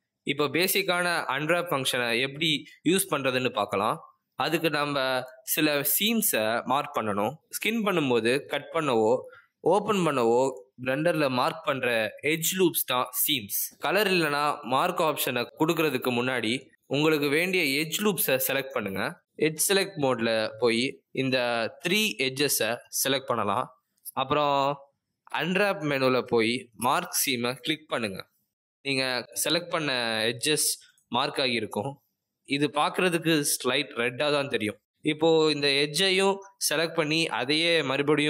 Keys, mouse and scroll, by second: 0.1 click, 1.7 a, 2.4 middle click, 5.6 middle click, 10.0 middle click, 12.9 middle click, 17.6 click, 19.5 click, 20.5 shift+click, 21.8 middle click, 23.7 shift+click, 26.3 middle click, 28.0 click, 32.9 middle click, 36.9 click, 37.9 middle click.